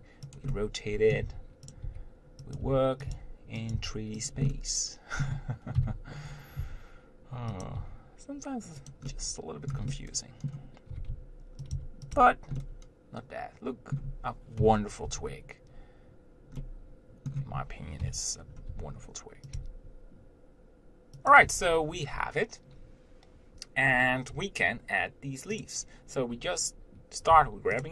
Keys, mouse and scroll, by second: 0.7 middle click, 1.5-4.0 typing, 4.7-6.0 middle drag, 6.8 r, 8.1 g, 9.3-11.1 middle drag, 11.1 g, 12.0 s, 12.4 Tab, 12.8-14.9 middle drag, 14.9 KP_7, 15.3 Tab, 16.8-18.2 middle drag, 18.2 KP_7, 18.9 r, 19.8 g, 21.7 Tab, 25.9 click, 27.6 g.